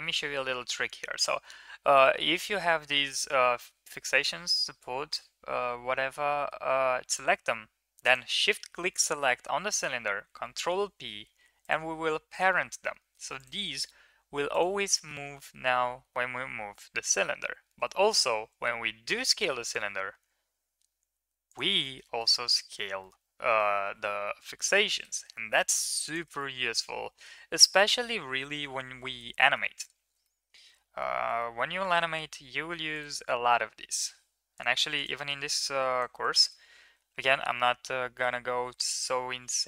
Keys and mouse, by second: 6.1 shift+middle drag, 7.9 shift+click, 10.1 ctrl+p, 12.2 click, 13.2 click, 15.8 g, 18.2 s, 21.6 middle click, 22.0 shift+middle drag, 22.5 middle click, 23.0-23.5 middle drag, 24.3 g, 26.3 middle click, 28.2 ctrl+KP_3, 29.2 shift+middle drag, 30.2-30.7 middle drag, 31.2-31.5 shift+middle drag, 33.2 Tab, 34.0 Tab, 34.8 click, 35.1 Tab, 35.4-35.9 drag, 36.2 shift+middle click, 37.3-38.0 shift+middle drag.